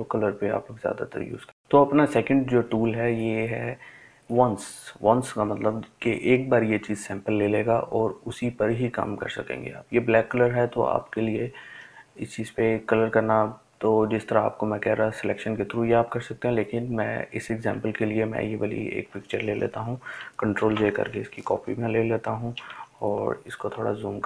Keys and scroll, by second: 22.5 ctrl+j.